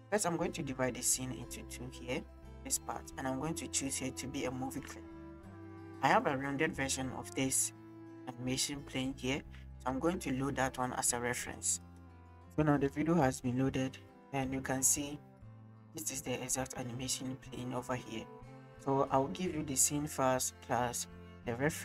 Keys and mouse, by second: 0.5-3.0 drag, 3.7-5.4 drag, 10.1 space, 11.9 click, 12.6 space.